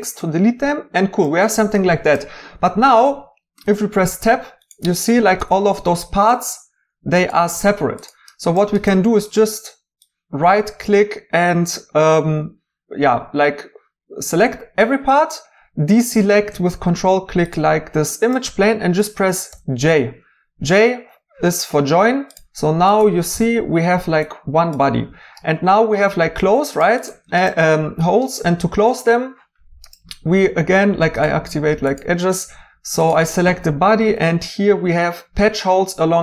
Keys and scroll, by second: 3.6 Tab, 5.3 g, 19.5 j, 23.3 g.